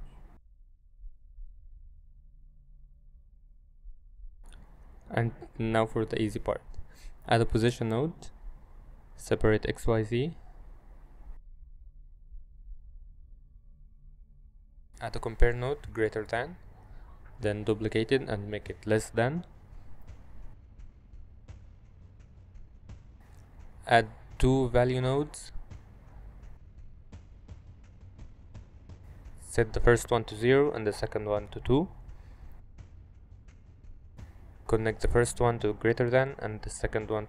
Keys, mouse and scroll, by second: 0.2 shift+a, 2.2 middle click, 2.6 g, 3.1 g, 6.5 middle click, 6.9 shift+a, 9.3 click, 10.1 a, 11.4 click, 11.6 middle click, 13.5 click, 13.6 g, 14.3 middle drag, 15.9-17.1 drag, 17.9 ctrl+click, 19.5 ctrl+shift+d, 20.3 y, 20.7 ctrl+click, 21.6 click, 24.2 shift+a, 28.3 click, 28.5 shift+d, 29.1 y, 29.4 click, 30.0 click, 32.9 middle click, 34.2 click, 35.6-36.4 drag.